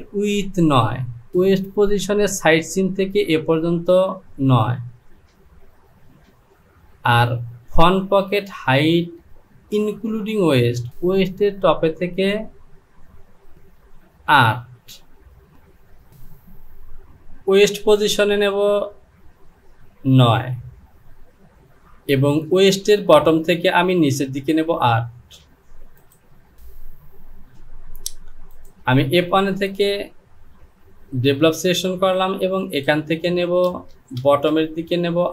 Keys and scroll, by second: 34.2 space.